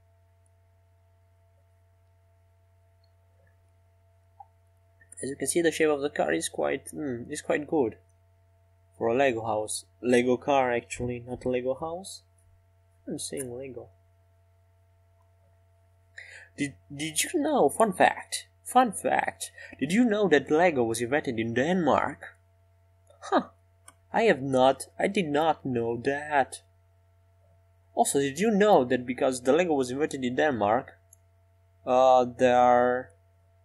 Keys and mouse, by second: 0.3-2.8 drag, 0.9-2.8 right drag, 2.8-3.8 middle drag, 3.8-10.9 right drag, 12.0 click, 12.0-14.3 right drag, 16.9 e, 20.9 s.